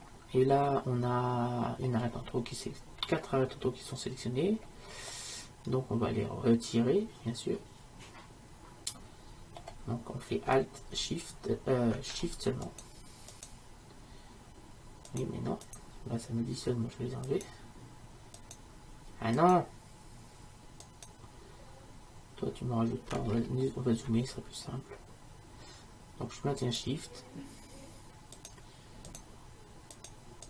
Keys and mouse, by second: 0.7-2.5 middle drag, 3.0-8.4 middle drag, 12.7-22.8 right drag, 23.3-26.7 middle drag, 26.7-30.4 right drag.